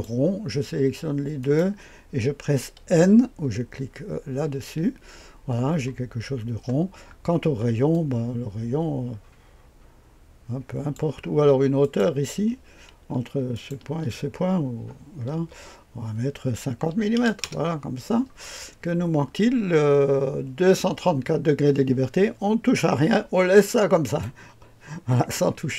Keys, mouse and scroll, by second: 1.4 click, 4.4 n, 6.3-7.9 scroll up 1, 7.9-11.0 drag, 11.8 click, 12.9 typing, 13.5 ctrl+click, 15.3 typing, 16.9 KP_5, 17.1 KP_0, 17.4 Return, 24.0 click.